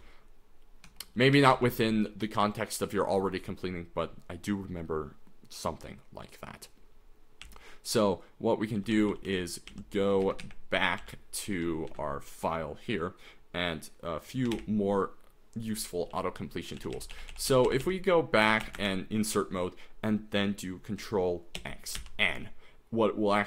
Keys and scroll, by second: 0.9 Escape, 1.4 d, 1.5 d, 2.1 k, 7.6-11.9 typing, 14.2-15.0 typing, 16.1-18.5 typing, 18.6 Return, 18.8 Return, 21.6 ctrl+x, 22.0 ctrl+n.